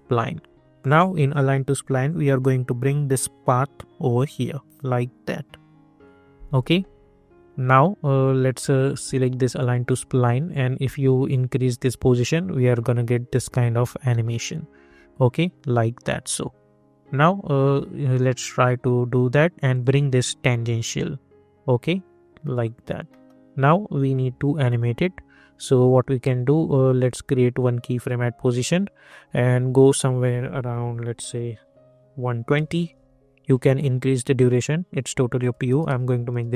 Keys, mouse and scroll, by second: 2.4-6.4 drag, 9.5-14.8 drag, 14.8 scroll down 1, 19.7 click, 22.4 middle click, 23.5 scroll down 1, 26.7 -, 27.9 click, 32.9 Return, 34.1 click, 36.3 Return.